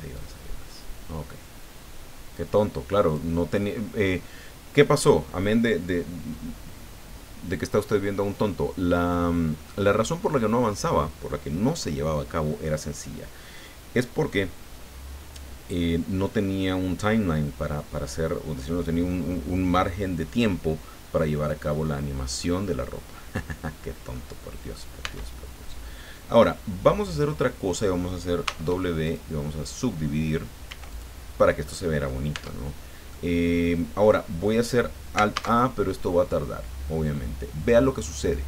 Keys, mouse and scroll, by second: 0.1-3.3 drag, 4.8-9.8 middle drag, 22.4-23.4 middle drag, 24.1 middle click, 25.0 Tab, 26.4-28.1 middle drag, 28.4 w, 29.0 click, 30.6 w, 30.8 click, 31.6 click, 31.8 middle click, 32.5 Tab, 33.1-34.6 middle drag, 35.3 alt+a.